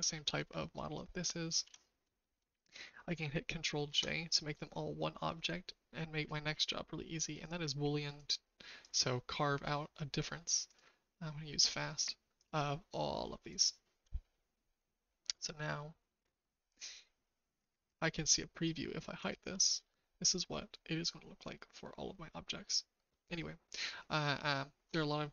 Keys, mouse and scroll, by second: 0.7 click, 1.6 ctrl+z, 3.8 ctrl+j, 7.4 click, 8.2-9.0 drag, 10.6 click, 12.3 click, 19.1 click, 19.8-24.8 shift+middle drag.